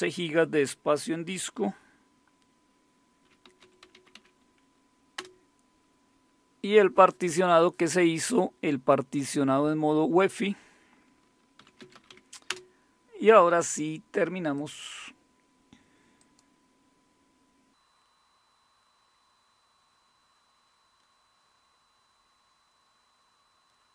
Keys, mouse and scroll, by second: 3.2-4.6 typing, 5.2 Return, 11.3-12.6 typing, 14.5 click, 16.2 click, 16.7 typing, 18.0 click, 18.0 typing, 18.8 click, 21.0 click, 23.7 click.